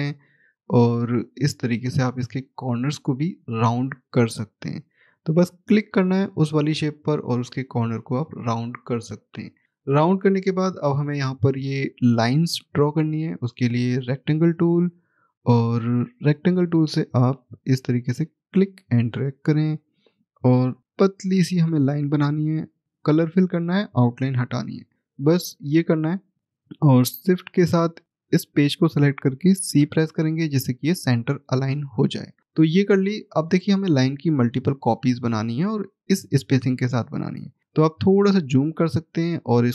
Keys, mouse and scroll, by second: 8.3 scroll down 1, 9.8 middle click, 14.0 click, 15.0 scroll up 1, 17.6 click, 23.6 right click, 25.4 right click, 25.5 click, 27.2 shift+click, 32.3 click, 32.4-33.0 scroll down 1, 33.0 middle click, 37.1 middle click, 38.0-39.2 scroll up 1, 39.2 click.